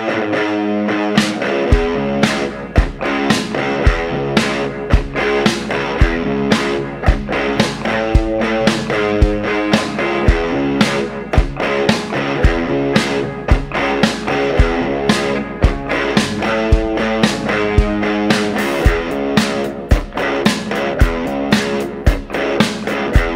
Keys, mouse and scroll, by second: 0.7 click, 1.5 click, 2.5 click, 3.6 click, 4.3 shift+o, 4.9 shift+middle click, 5.4-5.8 shift+scroll up 2, 5.9 middle click, 7.6 click, 8.8 click, 9.3 shift+o, 13.7 click, 15.5 click, 16.9 click, 17.7-18.5 scroll up 2, 20.1 shift+o, 21.0-21.3 shift+scroll down 1, 21.8 scroll down 1, 22.0-23.3 middle drag.